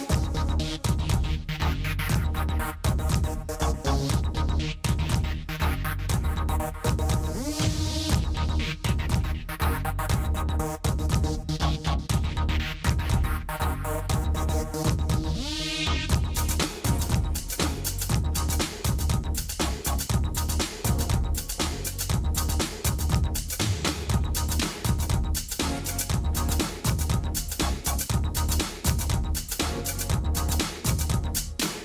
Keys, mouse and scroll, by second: 1.0 click, 1.1 s, 2.4 s, 4.8 s, 6.4 s, 8.8 Tab, 9.6 Tab, 10.1 a, 11.8-12.7 middle drag, 13.2 middle click, 14.4-15.4 middle drag, 15.4 s, 16.3-18.6 middle drag, 19.5 Tab, 20.1 h, 20.5 Tab, 22.4 Tab, 24.8 middle click, 24.9 s, 26.0 s, 28.1 s, 28.3 y, 28.9 s.